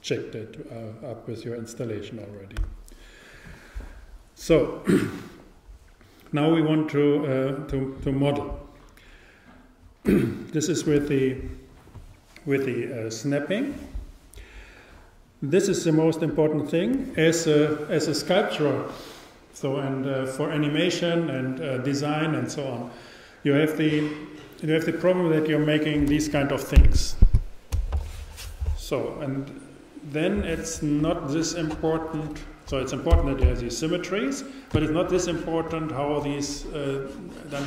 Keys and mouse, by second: 2.6 t.